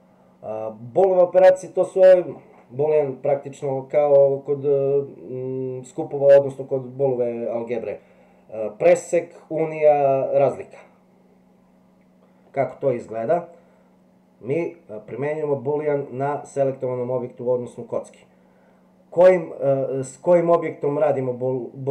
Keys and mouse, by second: 21.1 click.